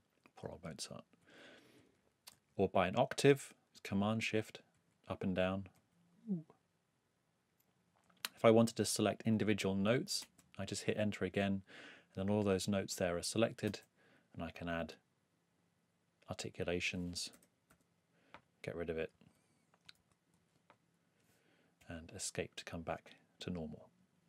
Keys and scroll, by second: 1.2 shift+Up, 1.7 shift+Down, 4.7 shift+super+Up, 5.7 shift+super+Down, 10.2 Return, 13.6 i.